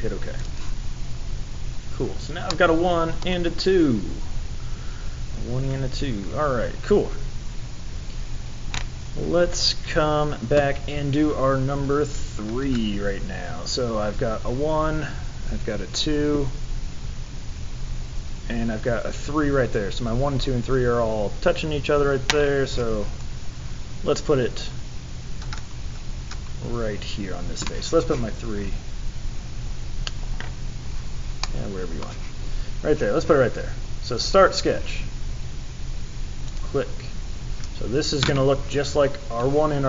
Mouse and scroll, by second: 0.4 click, 1.2-1.7 scroll down 4, 2.5 middle click.